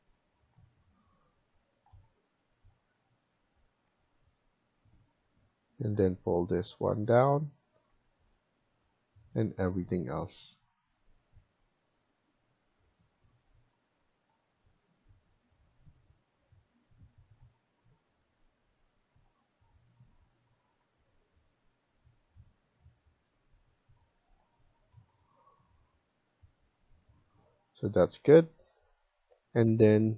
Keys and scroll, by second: 0.2 Escape, 1.5 Escape, 7.8 Escape, 20.5 Escape, 24.0 Escape.